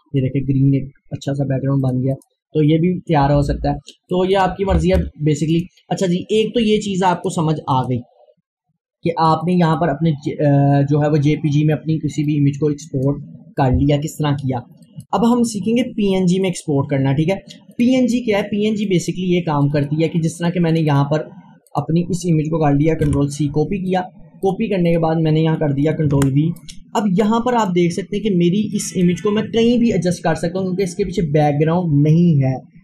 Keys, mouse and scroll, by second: 1.9 click, 2.6 scroll down 1, 4.1 click, 5.0 Delete, 5.5 click, 12.3-14.9 drag, 16.9 click, 23.1 ctrl+c, 23.9 click, 26.1 ctrl+v, 27.3 click, 28.2 scroll up 1, 28.8 click.